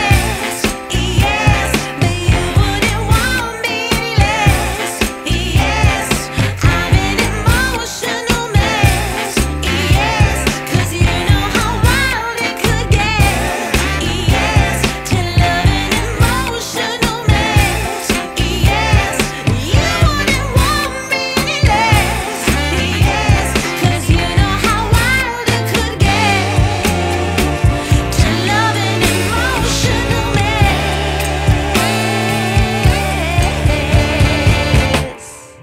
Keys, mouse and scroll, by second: 6.6 shift+click, 6.6 shift+a, 9.7 ctrl+s, 10.5-14.2 drag, 14.2-15.4 scroll down 7, 15.5-16.2 drag, 16.2 scroll up 2, 17.5-18.9 drag, 18.9 r, 22.3 ctrl+z, 23.4-27.8 drag, 27.8 ctrl+z, 28.7 ctrl+s, 29.4-30.0 scroll up 3, 30.0-31.2 middle drag, 31.2-35.3 drag, 35.5-35.6 drag.